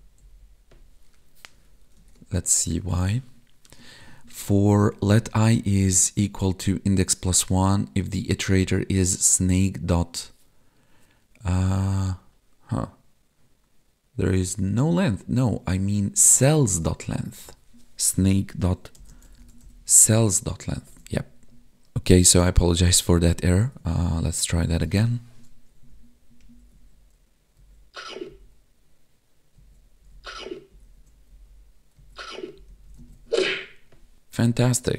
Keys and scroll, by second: 0.2 Left, 2.2 Tab, 20.8 ctrl+s, 23.8 Tab, 25.9 Up, 26.4 Left, 26.7 Down, 27.5 Right, 28.3 Up, 29.5 Right, 30.0 Up, 30.1 Left, 30.7 Down, 30.8 Left, 31.3 Down, 32.0 Right, 32.6 Up, 32.7 Left, 32.9 Down, 33.0 Right, 33.1 Up.